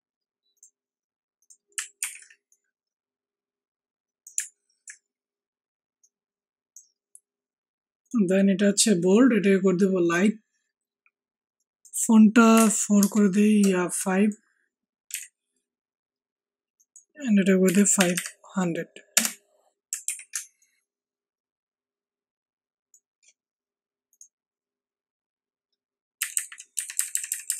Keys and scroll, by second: 1.9 ctrl+t, 12.5 4, 12.9 Return, 15.1 5, 17.6-18.1 typing, 19.1 Return, 20.0 ctrl+t, 26.2 Right, 26.3 Right, 26.4 Right, 26.7 Down, 26.9 Down, 27.2 Down.